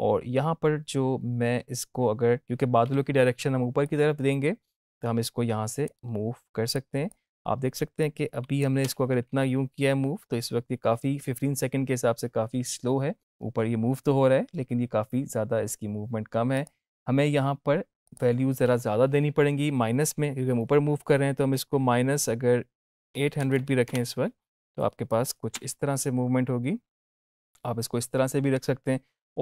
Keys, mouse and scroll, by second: 8.7 space, 14.5 space, 16.5 click, 25.0 click, 25.5 space, 29.1 space.